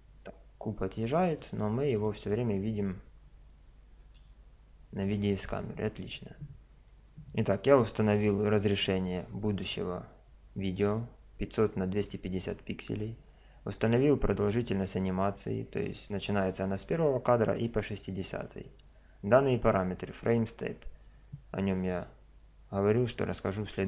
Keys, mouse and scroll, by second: 1.3-3.7 drag, 3.7-5.1 middle drag, 4.1 KP_0.